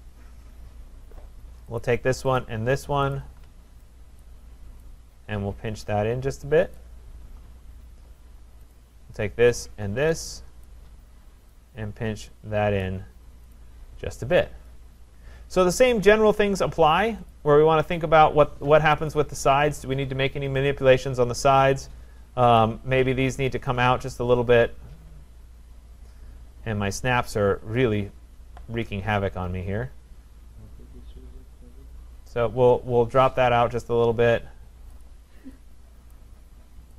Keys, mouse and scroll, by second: 0.0-1.3 scroll down 6, 1.8 click, 2.4 shift+click, 3.2 click, 4.2 click, 5.5 scroll, 6.8 click, 7.2-7.7 scroll, 7.7-8.5 scroll, 8.7 click, 9.7 shift+click, 10.7 click, 12.9 click, 13.6 click, 14.6 shift+click, 15.2-15.7 scroll, 17.2 middle click, 17.3 click, 19.1 click, 22.6 click, 27.5 scroll, 28.8-29.4 scroll, 29.4-31.8 scroll, 32.3 click, 32.7-33.2 scroll, 33.2-33.9 scroll, 33.9 scroll, 35.0 click, 36.1 click.